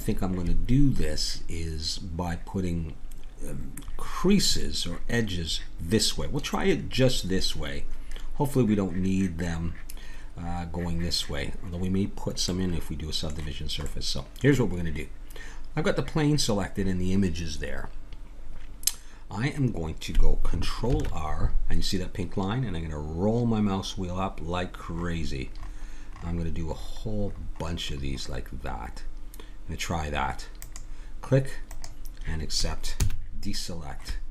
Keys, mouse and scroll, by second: 12.5-20.9 middle drag, 20.9 ctrl+r, 33.0 a, 33.8-34.3 middle drag.